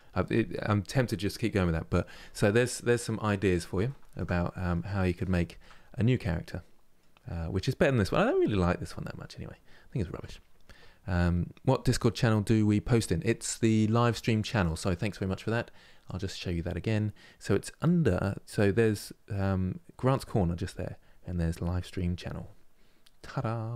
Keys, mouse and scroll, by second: 2.5-5.5 middle drag, 5.5-6.0 scroll down 1, 6.0-16.2 middle drag.